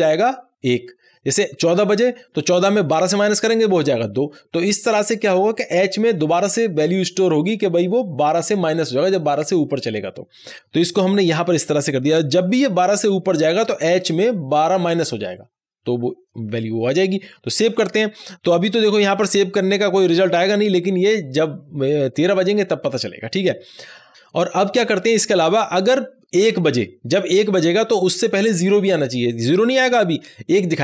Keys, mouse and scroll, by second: 17.3 ;, 17.6 ctrl+s.